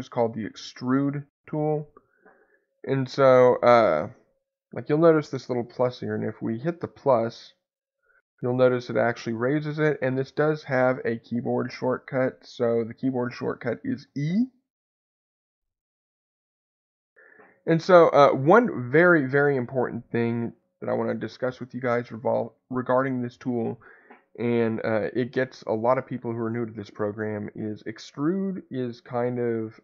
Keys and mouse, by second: 5.8 middle click, 7.9-9.7 drag, 11.6 click, 18.4 click, 22.0 shift+middle click.